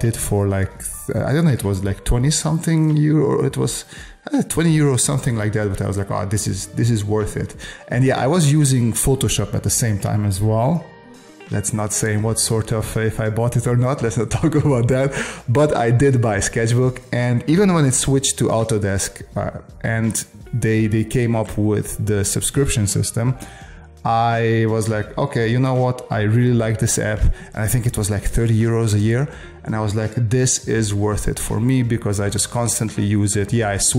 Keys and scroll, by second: 31.7 space.